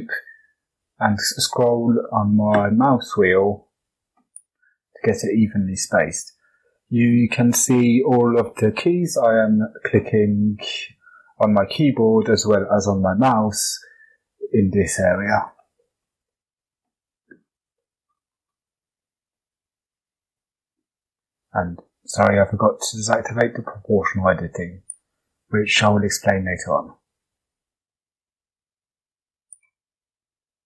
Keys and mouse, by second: 16.0 middle click, 17.7 shift+middle click, 18.7 g, 24.2 click, 26.7 click, 27.6 g, 29.9 click, 30.4 shift+click.